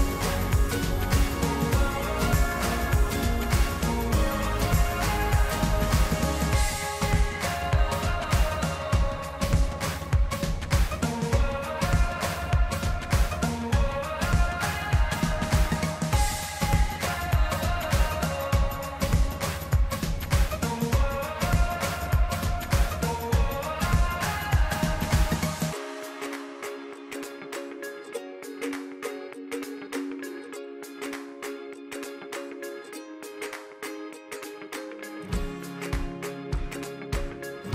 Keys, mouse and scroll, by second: 1.5 click, 3.9 scroll up 3, 5.2 click, 7.0 scroll up 1, 7.1 middle click, 7.7 scroll down 4, 8.1 shift+middle click, 8.7-9.6 scroll up 2, 9.7-10.3 middle drag, 10.3 KP_1, 11.7 e, 15.1-18.7 middle drag, 18.7 click, 22.1-22.5 scroll up 4, 22.5-23.9 middle drag, 23.9 click, 26.3-26.9 scroll up 18, 27.1 scroll down 2, 27.9-28.2 scroll up 1, 28.2-28.7 scroll down 8, 28.7-29.9 scroll up 1, 29.9-30.9 shift+middle drag, 30.9-31.4 scroll up 4, 32.1 click, 34.9 middle click, 35.7-36.1 scroll up 3, 36.3-37.7 middle drag.